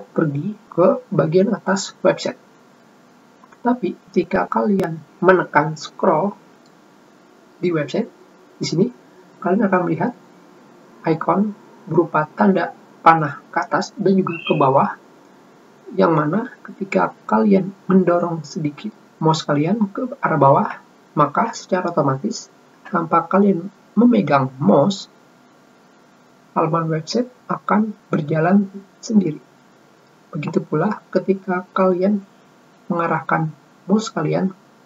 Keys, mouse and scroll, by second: 1.6 scroll up 2, 2.4-3.0 scroll up 4, 7.2 middle click.